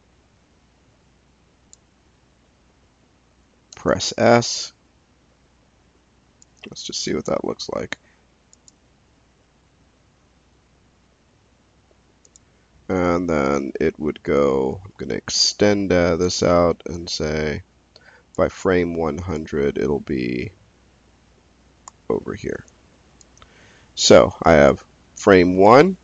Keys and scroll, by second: 3.7 s, 22.5 s.